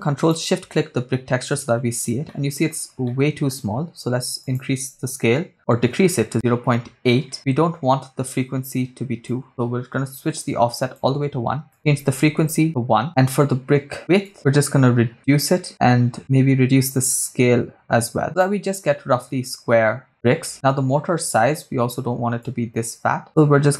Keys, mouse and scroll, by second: 0.4 ctrl+shift+click, 2.4 middle click, 3.0 middle click, 4.4-6.4 drag, 9.3-11.0 drag, 11.7 click, 13.0 middle click, 14.2-15.7 shift+drag, 16.2-18.5 shift+drag, 19.8-20.3 scroll up 3, 22.4-23.7 shift+drag.